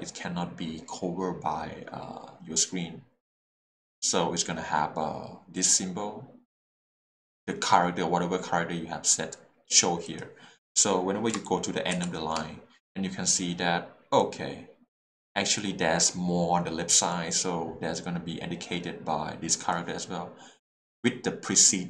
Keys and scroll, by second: 11.9 shift+4, 14.2 4.